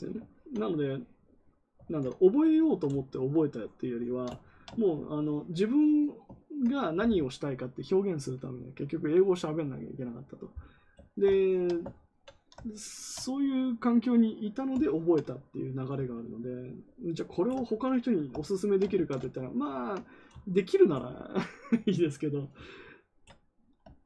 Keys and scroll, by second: 1.8 ctrl+z, 18.9 ctrl+z.